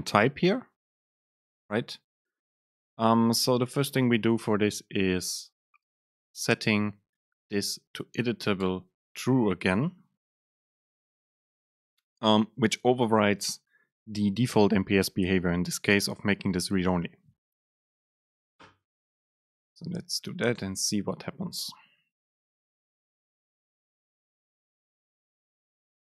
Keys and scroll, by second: 4.3 super+space, 9.2 Right, 9.9 super+space.